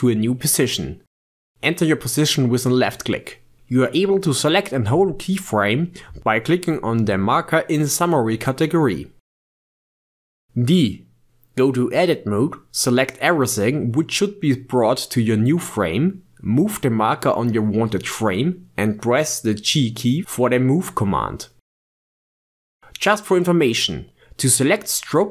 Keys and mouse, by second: 3.6 click, 5.0 click, 7.0 shift+d, 10.2 Tab, 12.2 a, 17.3-20.0 drag, 20.0 g, 22.7 click, 23.7 click, 24.8 click.